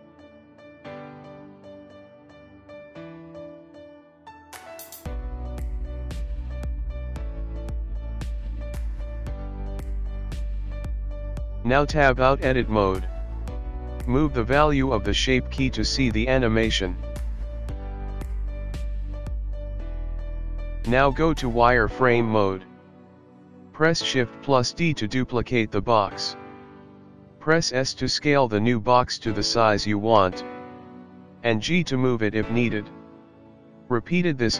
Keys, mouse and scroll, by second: 5.7-6.5 alt+scroll down 18, 8.0 click, 8.6 middle click, 11.3 Tab, 13.2 click, 14.2 click, 15.1 click, 21.9 Escape, 21.9 click, 21.9 shift+d, 22.1 click, 23.9 shift+d, 25.4 s, 27.0 Escape, 27.3 click, 27.5 click, 27.9 click, 28.7 click, 31.6 shift+d.